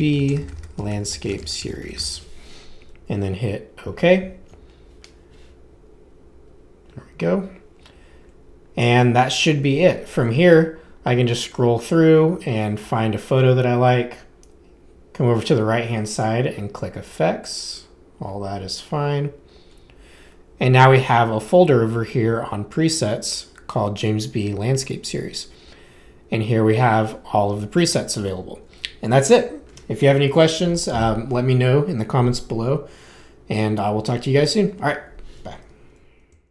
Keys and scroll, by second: 0.0-2.5 typing.